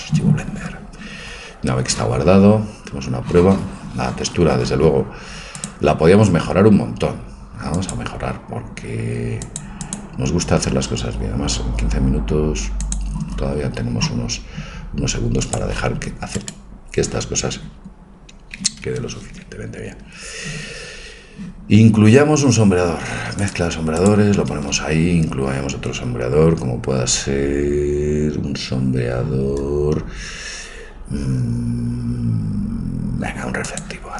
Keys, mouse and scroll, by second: 1.4-5.3 middle drag, 5.6-7.4 drag, 15.9 click, 16.5-21.5 right drag.